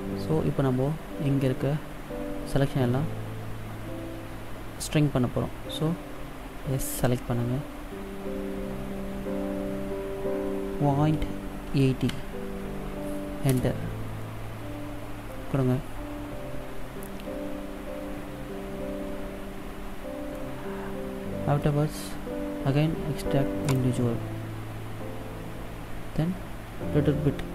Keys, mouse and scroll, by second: 7.2 s, 20.5 middle click, 22.1-22.9 scroll down 1, 23.8 click.